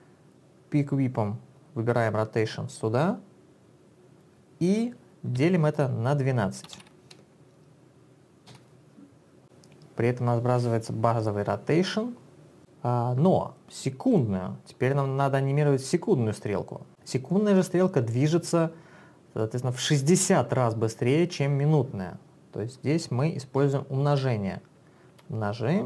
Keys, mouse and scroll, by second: 0.8 click, 5.4 /, 6.6-7.3 typing, 8.5 Return, 12.6 click, 14.1 click, 24.1 alt+click.